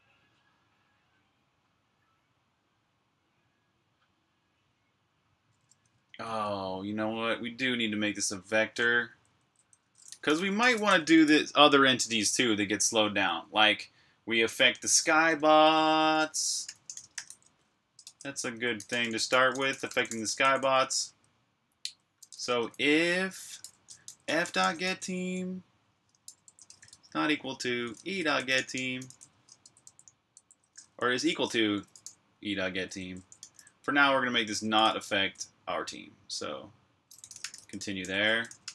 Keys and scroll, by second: 5.8 Escape, 6.1 typing, 8.4-11.1 typing, 12.9-13.7 typing, 15.7-25.2 typing, 36.7-38.7 typing.